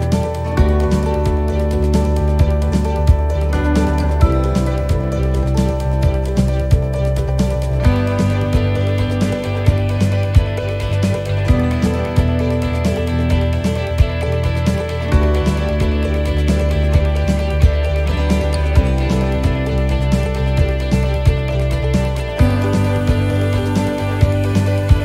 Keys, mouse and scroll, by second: 0.0 shift+middle click, 0.2 scroll down 1, 0.7 middle click, 1.3 scroll down 1, 1.8 middle click, 3.4 click, 4.7 right click, 5.6 right click, 6.2 shift+right click, 6.3 shift+right click, 8.6-11.4 shift+right click, 11.7 middle click, 13.0 shift+middle click, 13.3 scroll up 2, 14.3 shift+right click, 15.2 shift+right click, 16.0 shift+right click, 17.0 shift+right click, 17.1 middle click, 17.7 scroll down 2, 18.1 middle click, 20.3 e, 20.9 s, 22.8 middle click, 23.1-23.6 scroll down 3, 23.8 shift+middle click, 24.4 middle click, 24.9 scroll up 2.